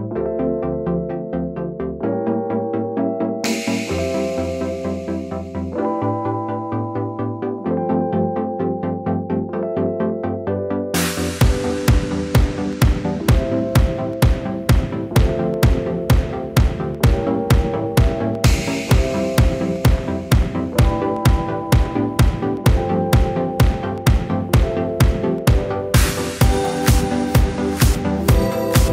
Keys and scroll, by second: 7.7-8.6 typing, 9.7 typing, 10.0 Return, 11.0 typing, 11.3 Return, 18.5 l, 20.9 Right, 21.1 Right, 28.2 l.